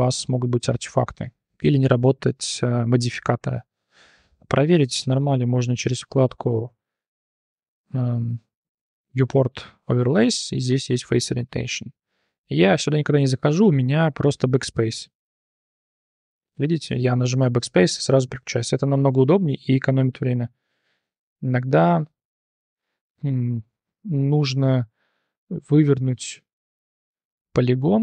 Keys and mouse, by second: 6.1 click, 13.8 click, 14.7-17.5 typing, 18.8-20.4 drag, 20.8 Tab, 21.1 3, 21.2 click, 21.5 click, 22.7 BackSpace, 23.6 End, 24.2 click, 24.9 shift+drag, 25.4 click, 27.3 shift+n.